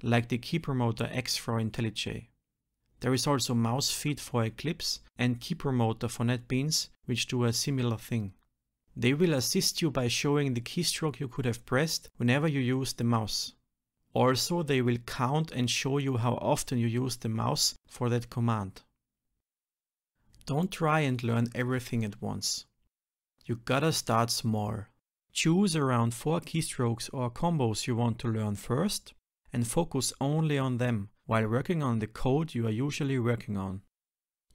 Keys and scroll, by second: 21.2 ctrl+alt+shift+t, 27.4 ctrl+alt+shift+t, 32.0 ctrl+alt+v, 33.1 ctrl+shift+Up.